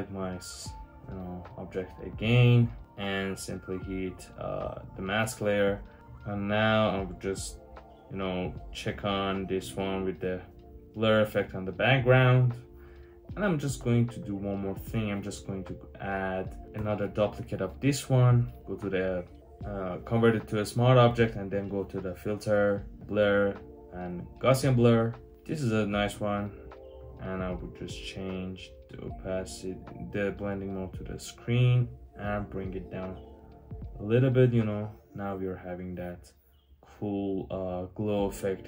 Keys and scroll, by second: 16.6 super+j.